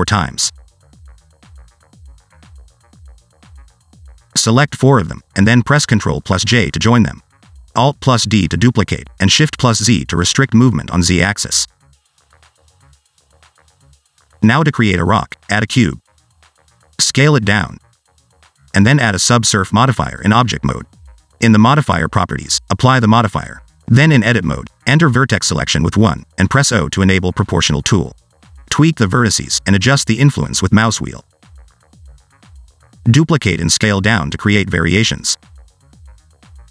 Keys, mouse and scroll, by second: 0.0 shift+middle click, 0.5-4.0 typing, 4.3 shift+click, 4.5 shift+click, 4.8 shift+click, 5.1 ctrl+j, 5.7 scroll down 1, 5.8 middle click, 6.2 scroll down 2, 6.5 s, 7.1 scroll down 1, 7.1 shift+middle click, 7.2 alt+d, 8.8 alt+d, 9.6 s, 10.1 alt+d, 11.0 scroll down 2, 11.1 middle click, 11.3 shift+middle click, 11.5-11.8 shift+scroll up 3, 11.8 s, 12.4 alt+d, 13.8 scroll down 1, 13.9 middle click, 14.1 scroll up 1, 15.0 shift+right click, 15.5 shift+a, 17.3 Tab, 17.6 s, 18.4 shift+middle click, 18.6-19.1 scroll up 2, 19.1 click, 20.6 Tab, 21.1 ctrl+2, 21.5 scroll up 3, 21.8 shift+middle click, 23.0 click, 23.6 click, 25.7 Tab, 26.3 click, 26.7 middle click, 27.7 o, 28.3 g, 30.4 click, 30.4 middle click, 30.7 g, 31.3 middle click, 31.6 right click, 32.5 scroll down 2, 32.6 middle click, 32.8 s, 33.0 shift+middle click, 33.3 middle click, 33.4 alt+d, 34.2 s, 34.8 shift+middle click, 35.9 alt+g, 36.0 alt+d, 36.4 s.